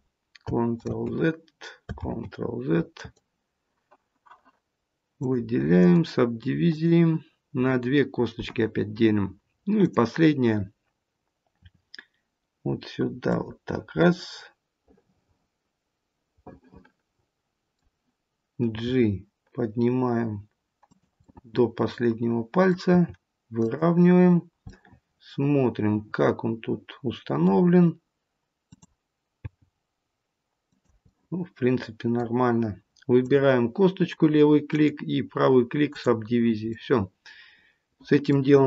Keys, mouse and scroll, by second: 0.7 ctrl+z, 1.9 ctrl+z, 2.8 right click, 5.1 click, 5.7 right click, 9.7 click, 11.5 e, 13.9 middle click, 18.7 g, 21.2 middle click, 22.9 g, 24.6 middle click, 28.5 click, 29.3 g, 31.0 middle click, 33.1 click, 34.6 right click, 36.7 middle click, 37.4 middle click, 38.5-38.6 scroll down 1.